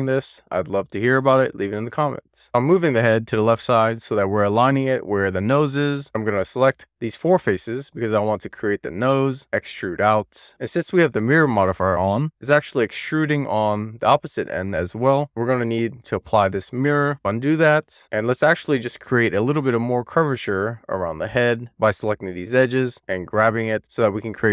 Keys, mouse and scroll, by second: 2.4 Tab, 2.6 click, 3.5 alt+z, 3.7 alt+z, 3.8 Tab, 5.0 Tab, 5.3 click, 5.6 alt+z, 5.7 alt+z, 6.0 3, 6.2 shift+click, 7.2 middle click, 7.6 scroll down 2, 7.7 middle click, 8.3 middle click, 9.3 d, 14.5 click, 15.7-16.8 middle drag, 17.1 super+z, 17.7 middle click, 18.0 scroll down 1, 18.2 ctrl+click, 18.3 middle click, 18.8 click, 19.1 g, 19.6 middle click, 20.0 middle click, 20.8 middle click, 21.2 click, 21.4 middle click, 21.7 middle click, 22.0 click, 22.1 middle click, 22.3 middle click, 22.5 click, 22.8 middle click, 23.1 super+z, 23.3 click, 24.1 shift+middle click.